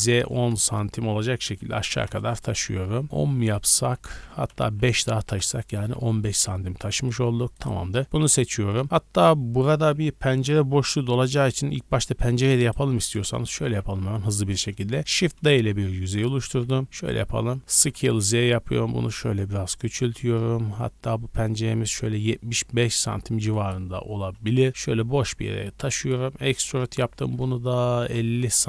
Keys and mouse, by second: 2.6-3.0 middle drag, 3.2 middle click, 3.5 click, 3.9 g, 6.2-11.5 middle drag, 11.5-12.4 drag, 12.4 Tab, 12.4 middle click, 12.6 click, 12.7-14.2 middle drag, 13.3 KP_1, 13.6 KP_3, 15.0 shift+d, 16.4 g, 17.7 s, 20.7-28.6 middle drag, 24.7 g, 26.3 e.